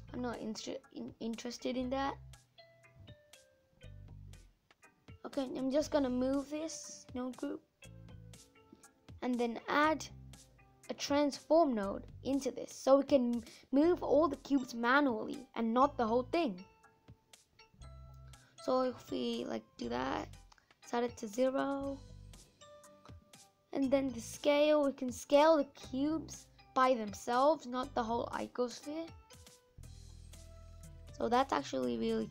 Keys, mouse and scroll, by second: 11.3 shift+a, 12.6-13.3 scroll up 2, 14.2-14.6 scroll down 9, 15.9-27.4 drag, 27.4-28.6 middle drag, 28.6-30.6 scroll up 2, 30.6-31.2 scroll up 1, 31.2 click, 31.6 middle click, 32.0-32.3 scroll up 3.